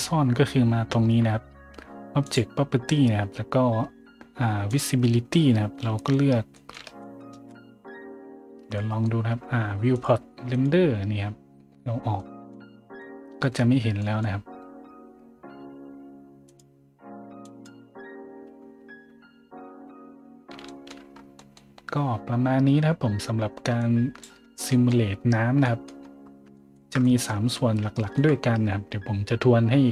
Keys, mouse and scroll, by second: 2.2 click, 2.2 right click, 4.7 click, 4.7 right click, 5.1-5.6 scroll up 3, 6.5 middle drag, 7.0 shift+middle drag, 7.3 shift+z, 8.7 middle drag, 9.9 click, 10.5 click, 12.2-12.5 middle drag, 13.0-13.4 middle drag, 14.0 middle drag, 16.5 click, 17.4 click, 18.6 scroll up 1, 20.3 middle click, 20.7 shift+middle drag, 21.3 middle click, 23.8 click, 24.7 middle click, 25.1 scroll down 1, 25.6 middle click, 26.0 scroll up 1, 26.1-26.4 scroll down 1, 26.5 shift+middle drag, 27.0 middle click, 27.9 shift+middle drag.